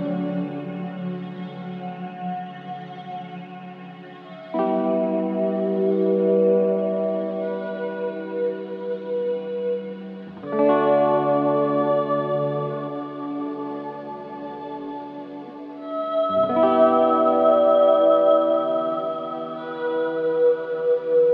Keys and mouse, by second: 1.6 click, 2.4 alt+click, 4.9 click, 7.0 ctrl+s, 8.2-10.3 drag, 11.2 click, 12.1 ctrl+s, 15.3 click, 16.3-17.3 drag, 17.5-17.8 typing, 18.9 click.